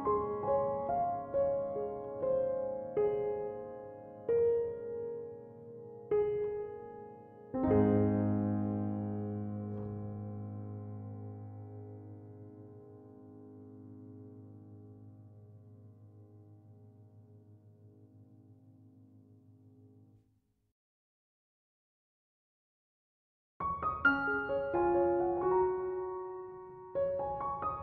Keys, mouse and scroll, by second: 3.8 click, 5.1 click, 7.6 click, 9.2-12.2 middle drag, 13.0 click, 14.7-16.6 middle drag, 16.6 scroll up 1, 17.2-20.2 shift+middle drag, 23.6 Tab, 25.7 click, 26.6 right click, 27.2 alt+right click.